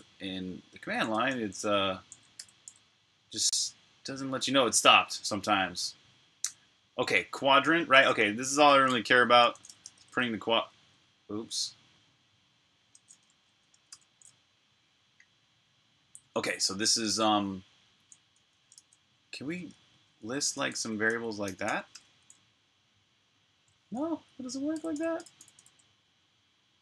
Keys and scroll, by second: 1.3 typing, 2.3 BackSpace, 9.2-10.4 typing, 12.1-13.8 typing, 18.4-22.1 typing, 24.2 Up, 24.6 BackSpace, 25.3 BackSpace.